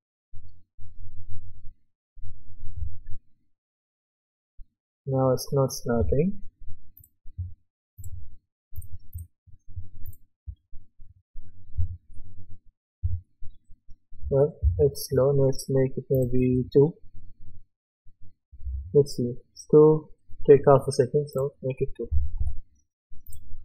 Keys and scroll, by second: 10.5 w, 11.8 d, 13.0 a, 14.6 Escape, 22.1 KP_2, 22.4 Return.